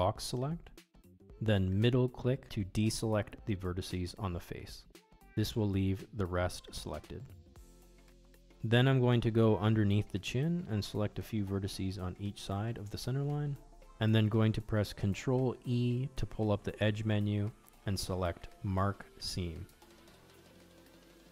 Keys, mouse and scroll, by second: 0.4-1.8 middle drag, 2.8 alt+click, 5.1 b, 8.8-10.4 middle drag, 10.9 middle click, 12.6 shift+click, 13.5 shift+click, 13.9 shift+click, 15.5 middle click, 16.6-17.9 middle drag, 18.2 middle click, 18.8 middle click, 19.6 ctrl+e.